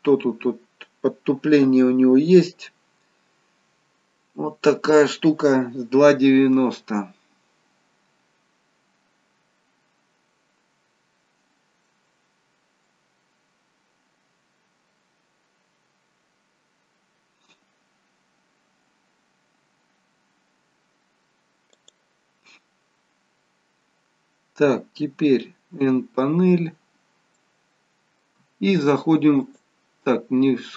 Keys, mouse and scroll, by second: 22.5-23.1 scroll down 1, 23.1 scroll down 1, 23.6-25.6 scroll down 2, 25.7 n, 26.8-27.3 scroll up 1, 27.3 middle click.